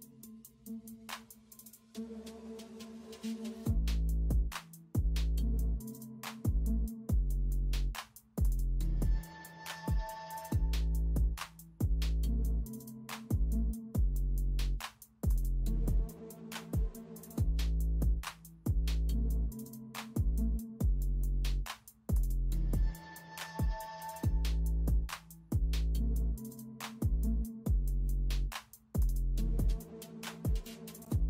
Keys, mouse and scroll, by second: 2.3 ctrl+space, 3.4 ctrl+alt+z, 5.1 ctrl+alt+z, 5.6 ctrl+alt+z, 7.3 ctrl+space, 9.4 space, 9.7 space, 13.3 space, 15.6 space, 16.8 space, 19.4-19.8 alt+scroll down 1, 19.9 ctrl+t, 20.2 alt+shift+click, 20.7-21.1 alt+scroll up 1, 21.9 alt+scroll up 1, 22.0 alt+click, 22.4 alt+shift+click, 22.6-23.0 alt+scroll up 1, 23.5 alt+shift+click, 24.3-24.7 alt+scroll up 1, 25.3 ctrl+t, 25.6 shift+click, 26.3 alt+shift+click, 26.7 alt+shift+scroll down 1, 26.9 shift+click, 27.0 alt+shift+scroll up 1, 27.2 shift+click, 27.3 alt+shift+scroll down 1, 27.4 shift+click, 27.8 alt+shift+scroll up 1, 28.1 shift+click, 28.2 shift+click, 28.5 shift+click, 28.8 alt+shift+scroll down 1, 29.0 shift+click, 29.3 shift+click, 29.8 shift+click, 30.2 ctrl+shift+e, 30.4 shift+click.